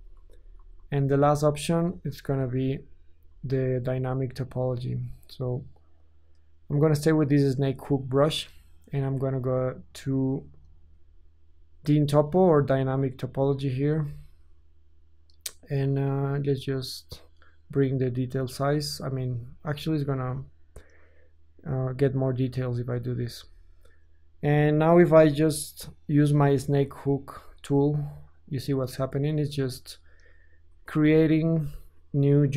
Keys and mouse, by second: 0.1 ctrl+z, 0.3 ctrl+z, 0.6 ctrl+z, 0.9 ctrl+z, 2.1 ctrl+z, 2.6 ctrl+z, 3.3 ctrl+z, 10.0 ctrl+drag, 10.7-11.1 ctrl+shift+drag, 11.5 click, 11.6-26.0 drag, 25.0 f, 26.0-27.6 middle drag, 27.6-30.3 drag, 30.4 shift+click, 30.9 ctrl+z, 30.9-32.5 ctrl+drag, 32.3 f.